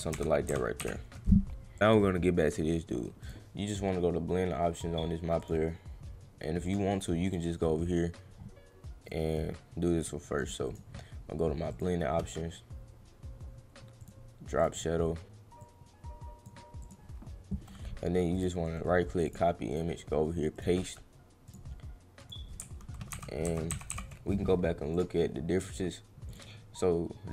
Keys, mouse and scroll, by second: 1.8 right click, 3.2 click, 5.4 click, 6.6 click, 7.3 click, 8.4 scroll down 1, 9.0 right click, 10.0 click, 10.3 click, 10.7 right click, 11.7 click, 14.0 click, 14.6 click, 15.6 click, 16.8 click, 18.3 right click, 19.2 click, 19.7 click, 20.5 right click, 21.4 click, 22.1 click, 24.9 click, 26.3 click.